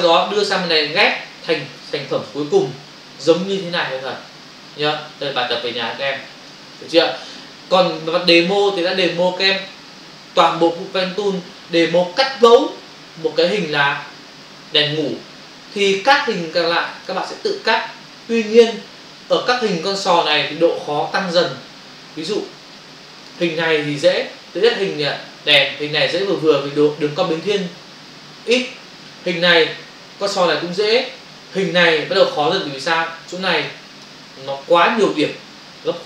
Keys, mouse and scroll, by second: 1.1 click, 2.3 v, 3.3 click, 3.9 typing, 4.6 ctrl+o, 5.6 ctrl+-, 12.3 click, 12.4 ctrl+space, 13.4 space, 15.0 ctrl+click, 16.5 ctrl+click, 19.7 f, 20.2 click, 22.3 click, 23.3 click, 23.4 double click, 24.5 Left, 32.0 Up, 33.6 click, 35.5 double click.